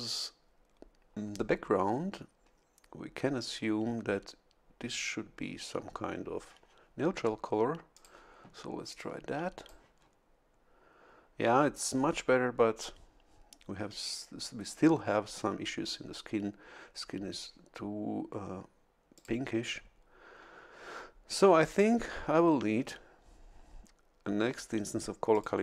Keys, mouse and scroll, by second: 7.9 click, 9.0 click, 19.1 click, 25.3 click.